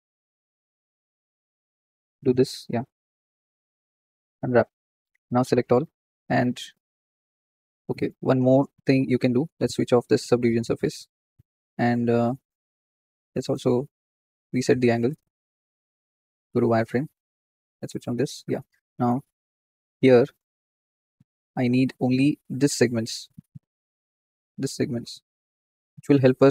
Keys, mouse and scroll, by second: 0.9 scroll up 2, 1.2-2.4 shift+middle drag, 2.4 ctrl+click, 3.3-4.2 right drag, 4.2-5.4 scroll down 2, 5.4 a, 7.6 click, 7.7-10.5 middle drag, 10.5 click, 11.2 scroll up 1, 11.5 shift+middle click, 11.9-12.3 scroll up 1, 12.3 Tab, 15.0-17.2 drag, 17.2 z, 17.9 click, 18.2-19.0 middle drag, 19.0 KP_1, 19.2-19.9 scroll up 3, 19.9 Tab, 20.3 shift+middle click, 20.6-21.5 scroll up 11, 21.5-24.1 shift+middle drag, 24.1 click, 24.3-25.2 scroll down 14, 25.2 shift+middle click, 25.7-26.5 scroll up 8, 26.1 shift+middle click.